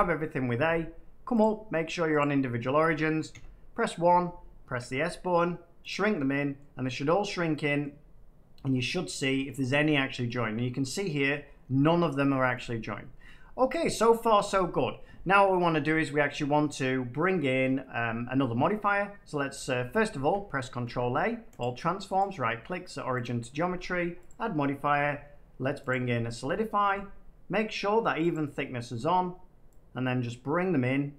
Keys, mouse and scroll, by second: 1.3-3.0 drag, 3.2 1, 3.9 1, 4.7 s, 5.8 click, 6.5 middle click, 6.8 middle click, 7.7 middle click, 9.0 middle click, 9.6-10.0 scroll, 10.2 middle click, 11.2 middle click, 12.0 shift+middle click, 12.6 shift+middle click, 12.7 middle click, 19.7 Tab, 20.8 ctrl+a, 21.5 click, 22.1 right click, 23.2 click, 23.6 click.